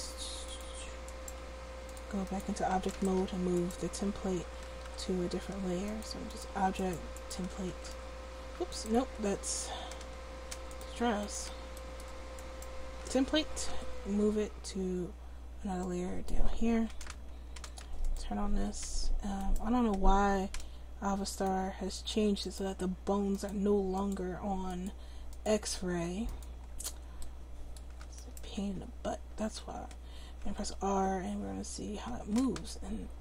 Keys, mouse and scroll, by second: 1.4 middle click, 4.8 m, 6.4 click, 7.9 m, 11.7-13.7 drag, 13.7 m, 18.0-19.4 drag, 21.3-28.2 drag, 28.2-30.0 right drag, 30.4 r.